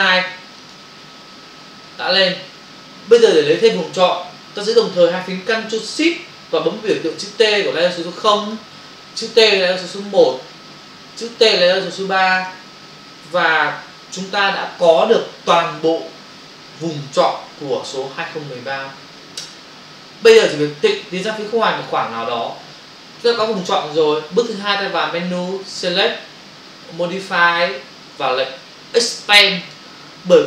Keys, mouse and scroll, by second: 0.6 ctrl+click, 25.7 click, 29.6 click.